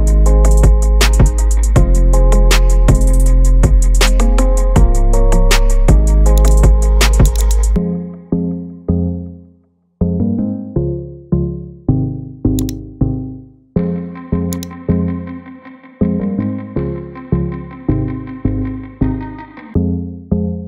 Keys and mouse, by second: 6.5 click, 7.3-12.7 drag, 14.5 click, 18.1 Tab.